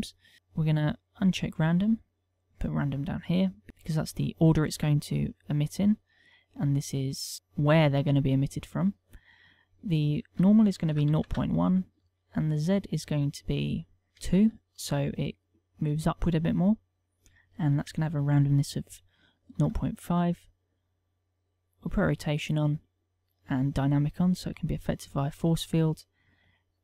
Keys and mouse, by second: 2.0 click, 3.3 click, 3.7 click, 8.7 middle click, 9.7 ctrl+click, 12.0 ctrl+click, 17.2 ctrl+click, 20.2 middle click, 21.6 click, 22.9 click, 25.6 click.